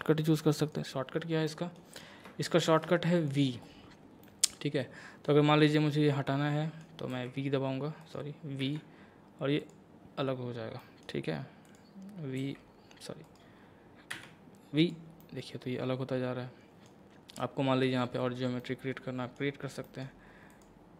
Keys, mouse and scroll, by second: 0.6 click, 1.1 scroll down 1, 1.5 middle click, 2.0-2.4 scroll up 2, 2.4 shift+middle click, 3.2 click, 4.2-7.1 middle drag, 7.1 g, 8.0 right click, 8.6 v, 9.6 click, 10.8 middle click, 11.7 click, 12.4 g, 13.2 right click, 14.1 v, 14.8 click, 15.2-19.8 middle drag, 20.5 click.